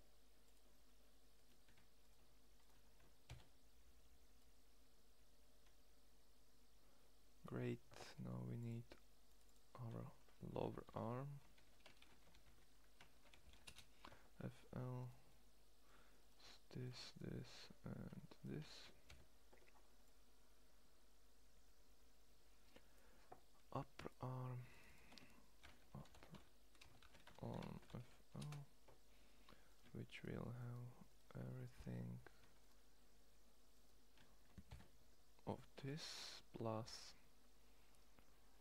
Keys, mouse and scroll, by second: 0.3 click, 0.3-1.0 middle drag, 3.0 ctrl+l, 14.9-17.4 middle drag, 17.7-18.7 middle drag, 18.7 ctrl+l, 25.6 p, 34.4 ctrl+l.